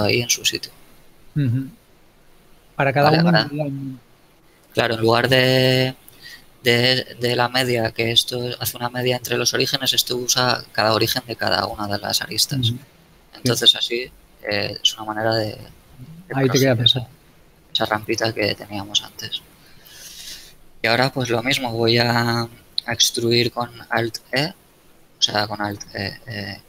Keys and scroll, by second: 13.3 KP_7, 16.6 z, 24.6 alt+e.